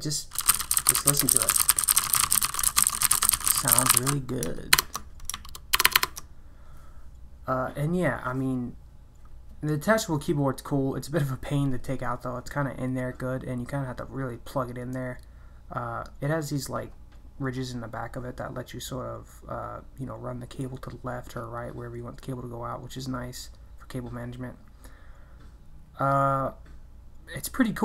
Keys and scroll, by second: 0.4-6.4 typing.